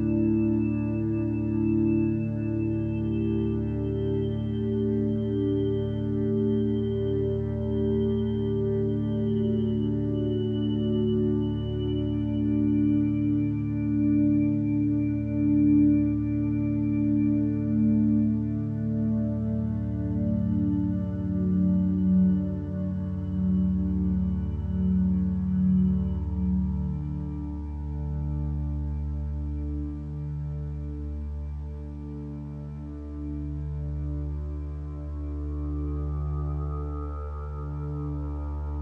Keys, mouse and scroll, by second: 2.7 b, 3.0 b, 26.7 ctrl+z, 30.7 ctrl+z, 34.3 ctrl+z, 34.7 ctrl+space.